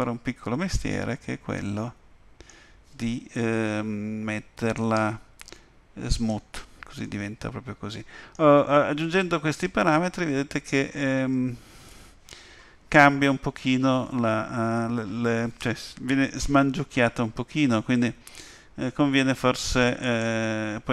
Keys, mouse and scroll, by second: 4.8 right click, 7.0 middle click, 9.0 Tab, 20.0 click.